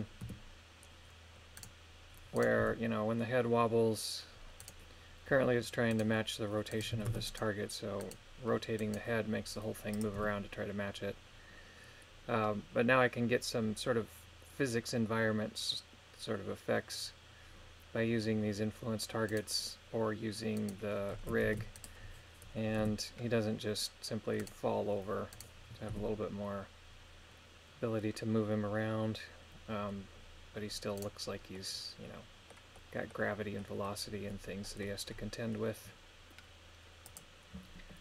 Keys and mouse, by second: 0.3 r, 2.4 right click, 2.6 r, 5.9 right click, 6.7 right click, 7.1 ctrl+Tab, 7.3 right click, 8.0 right click, 8.8 right click, 9.9 click, 10.2 r, 19.3 right click, 20.6 right click, 21.5 ctrl+Tab, 21.8 right click, 22.8 r, 25.3 right click, 26.0 r, 31.0 right click, 31.5 middle click, 32.7 middle click, 33.6 middle click, 34.6 middle click.